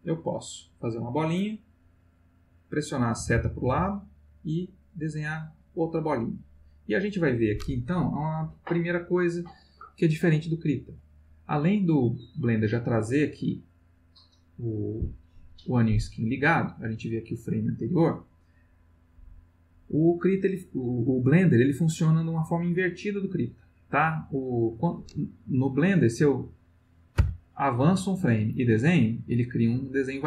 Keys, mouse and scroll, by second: 3.1 Right, 5.2 click, 13.2 click, 13.8 click, 14.3-15.0 drag, 27.1 Right, 28.5 click, 30.0 click.